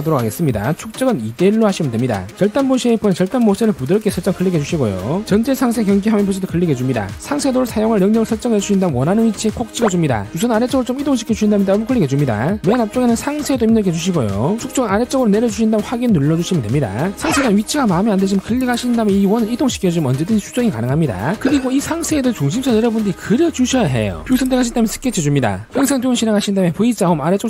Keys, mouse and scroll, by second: 0.4 shift+d, 5.1 click, 7.1 click, 7.3 click, 8.4 click, 10.0 click, 11.2 click, 12.4 click, 12.5 click, 12.9-14.4 typing, 16.8 click, 19.1 click, 19.8 click, 20.9 click, 23.3 click, 23.9 scroll up 1, 24.3 scroll down 1, 25.3 click, 26.8 click.